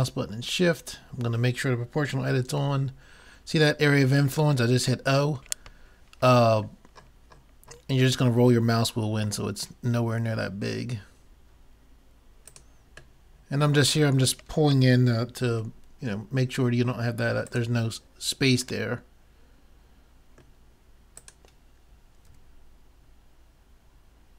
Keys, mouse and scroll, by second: 2.5 g, 13.2 middle click, 15.4 g, 20.6 middle click, 21.3-23.0 drag, 22.3 g.